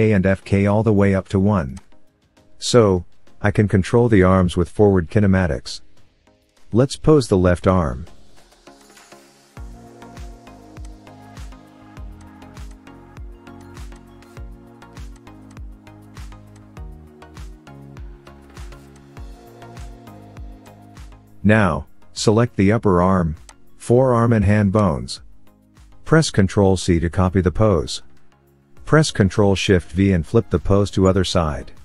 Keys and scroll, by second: 6.8 n, 11.2 KP_3, 11.8 r, 16.8 KP_1, 26.0 ctrl+c.